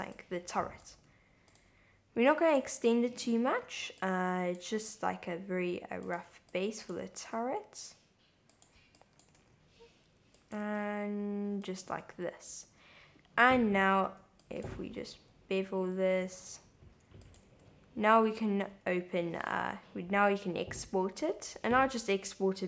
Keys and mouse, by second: 0.3 click, 0.9 g, 0.9 z, 1.5 click, 2.5 click, 4.0 click, 4.6 g, 6.0 click, 6.6 click, 7.2 g, 7.2 x, 8.5 click, 8.9 click, 9.4 g, 9.4 z, 10.4 click, 10.6 g, 11.6 click, 11.9 Tab, 14.1 Tab, 14.6 click, 14.8 super+b, 15.2 v, 16.2 v, 17.2 click, 17.5 Tab, 18.7 Tab, 19.2 Tab.